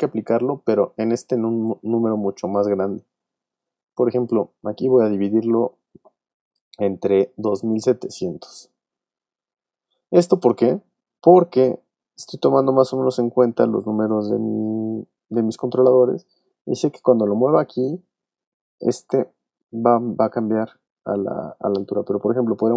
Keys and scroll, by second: 2.8 space, 3.7 shift+7, 4.8 shift+BackSpace, 5.7 shift+BackSpace, 7.2-10.1 typing.